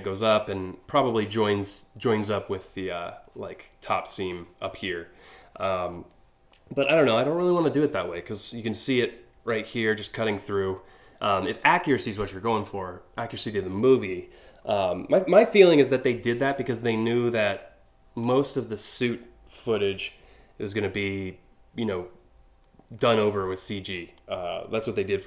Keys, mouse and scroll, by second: 14.2 scroll down 1, 14.5 scroll up 1, 15.2 scroll down 1, 17.8 click, 23.3 scroll down 2, 23.8 click.